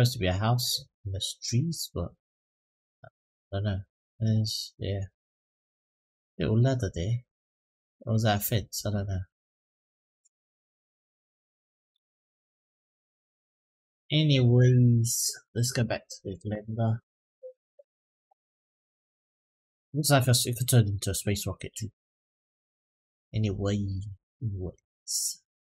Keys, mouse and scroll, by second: 18.9-23.9 middle drag, 24.2-24.7 scroll down 2, 24.7 middle drag, 25.3-25.7 scroll up 2.